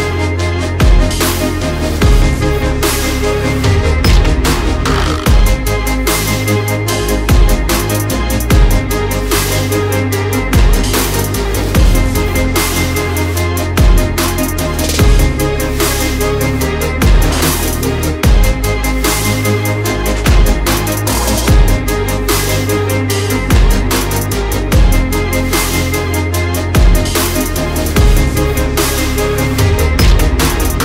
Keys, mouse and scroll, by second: 0.5 shift+Right, 1.5 shift+Right, 2.3 shift+Left, 2.7 Right, 2.8 Right, 3.0 Right, 4.4 shift+click, 7.5 double click, 8.2 click, 8.9 Right, 9.0 Right, 9.2 Right, 10.5 ctrl+z, 10.7 ctrl+z, 11.0 ctrl+z, 11.3 ctrl+z, 11.6 ctrl+z, 12.2 ctrl+shift+z, 13.1 click, 13.9 shift+right click, 14.9 click, 16.8 click, 17.8 Left, 18.0 Left, 18.6 Left, 20.2 click, 22.7 double click, 23.1 alt+scroll down 1, 23.6-24.1 scroll up 2, 24.9 alt+scroll up 1, 25.4 click, 25.7-26.1 alt+scroll down 1, 26.7 click, 29.4 click.